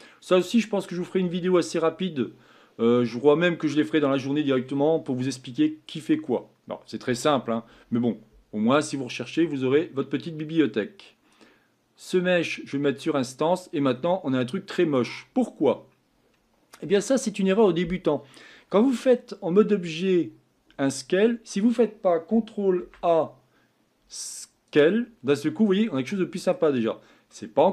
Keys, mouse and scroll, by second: 13.0 click, 13.8-14.4 scroll down 2, 14.4 middle click, 15.3-20.6 scroll up 2, 24.8 ctrl+a, 25.7-27.7 middle drag.